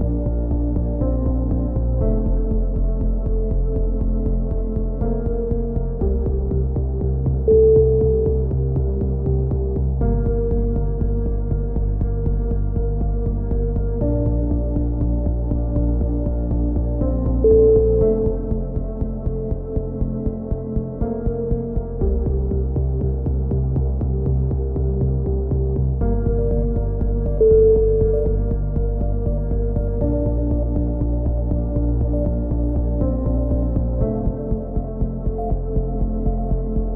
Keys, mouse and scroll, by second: 0.0 right click, 0.3-1.8 drag, 1.8 z, 2.3 z, 2.5 a, 2.7 middle click, 3.0 Tab, 3.4 click, 4.3 middle click, 4.9 click, 5.8 middle click, 6.6 KP_3, 7.0 click, 7.9 z, 13.8 click, 14.5 Tab, 15.7 click, 16.4 s, 17.4 s, 19.7 c, 20.2 right click, 20.5-21.7 drag, 21.8 ctrl+l, 22.3 click, 23.8 e, 24.5-25.5 drag, 26.5 a, 26.8 click, 27.5 middle click, 32.7 ctrl+r, 36.3 z, 36.8 a.